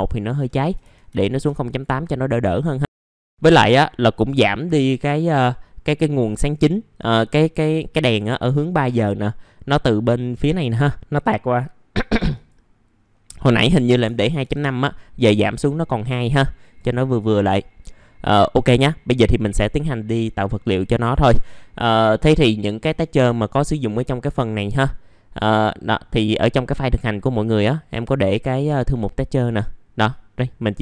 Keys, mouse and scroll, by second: 1.0 KP_8, 2.5 middle click, 3.3 click, 3.9 middle click, 4.8-5.6 scroll down 1, 12.1 click, 13.7 KP_2, 16.6 click, 17.5 middle click, 22.8-23.9 drag, 23.9-25.9 drag, 25.9 click, 28.0-30.8 drag.